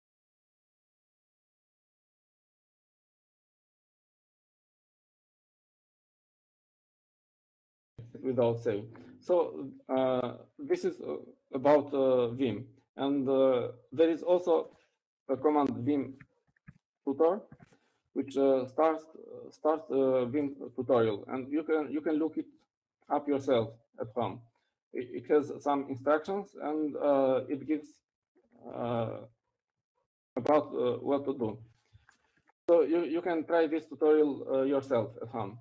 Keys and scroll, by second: 5.4-7.0 typing, 8.5 typing, 17.1-20.9 typing, 25.4 Down, 25.5 Down, 25.7 Down, 25.9 Down, 26.5 Down, 28.5-29.0 Down, 29.4-29.9 Down, 30.0 Down, 30.4 Down, 30.5 Down, 30.7 Down, 31.4-31.9 Down, 32.5 Down, 33.4 Down, 33.9 Down, 34.7 shift+Down, 34.7-35.6 typing.